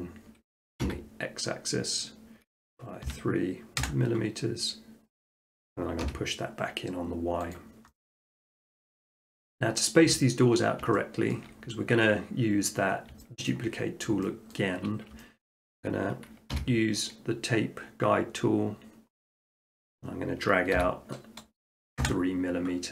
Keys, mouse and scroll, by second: 0.9 x, 3.1 3, 3.8 Return, 5.5 click, 6.1 y, 7.6 click, 8.3 middle click, 8.5 middle click, 9.2 shift+middle click, 9.2 middle click, 9.5 middle click, 9.7 shift+middle click, 10.5 middle click, 10.6 middle click, 11.3 shift+middle click, 11.4 shift+middle click, 11.7 middle click, 11.8 middle click, 11.8 shift+middle click, 12.7 middle click, 13.5 shift+middle click, 13.6 shift+middle click, 13.8 middle click, 14.0 middle click, 14.3 shift+middle click, 14.5 shift+middle click, 14.9 shift+middle click, 15.2 shift+middle click, 15.5 shift+middle click, 15.6 scroll, 16.6 t, 17.3 scroll, 19.5 click, 20.8 3, 22.0 Return.